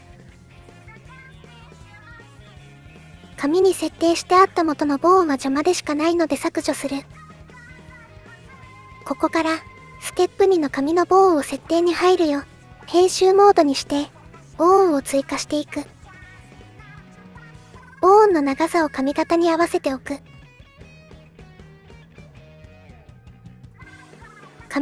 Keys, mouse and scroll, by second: 1.0 shift+click, 6.2 middle click, 6.7 click, 8.0 Delete, 8.8 middle click, 10.5 shift+middle click, 11.3 middle click, 12.2 middle click, 15.3 shift+a, 17.3-18.3 middle drag, 18.7 middle click, 20.2 click, 20.4 click, 20.6 click, 22.3 click, 22.8 middle click, 23.8 middle click, 24.1 middle click, 24.6 KP_1.